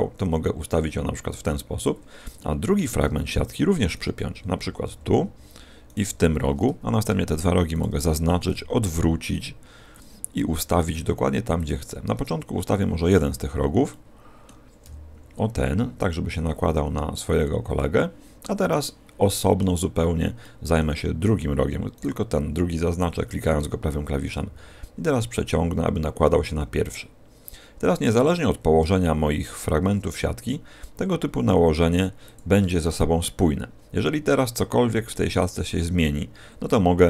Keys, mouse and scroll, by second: 1.7 click, 2.3 shift+middle click, 3.9 right click, 4.7 p, 5.8 right click, 6.0 p, 7.7 shift+right click, 8.4 r, 9.9 click, 10.3 g, 11.6 click, 12.0-12.7 scroll up 5, 12.7 middle click, 13.3-14.6 scroll up 2, 13.8 middle click, 15.1 g, 17.3 click, 17.9 middle click, 18.7 middle click, 19.9-20.4 scroll down 4, 20.3 middle click, 21.9 right click, 24.3 g, 32.3 shift+click, 33.4-33.8 scroll down 1, 34.2 scroll down 5, 36.9 a.